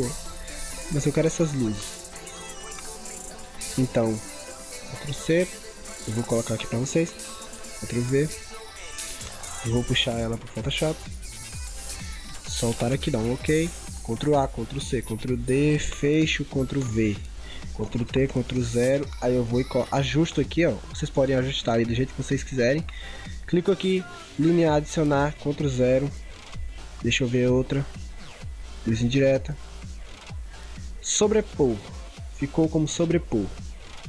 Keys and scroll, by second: 5.2 ctrl+c, 5.7 ctrl+c, 7.9 ctrl+v, 14.1 ctrl+a, 14.5 ctrl+c, 15.0 ctrl+d, 17.0 ctrl+v, 18.0 ctrl+t, 18.6 ctrl+0, 25.2 ctrl+0.